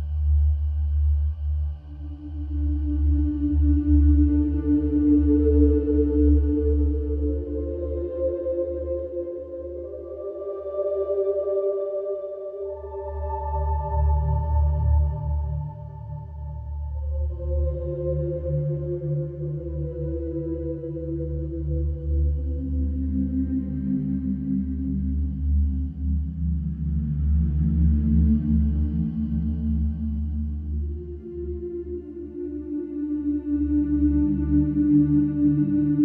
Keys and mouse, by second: 2.5-3.6 drag, 8.3-12.3 drag, 14.9 click, 16.7-22.8 drag, 21.9 Escape, 26.2 click, 29.8-31.3 drag, 32.7-33.7 drag.